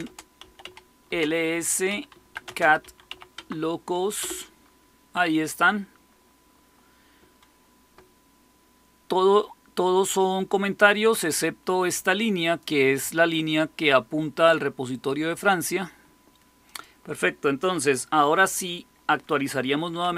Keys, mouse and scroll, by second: 0.0-3.5 typing, 4.1 Return, 10.1-12.6 drag, 16.6 click, 19.7-20.1 typing.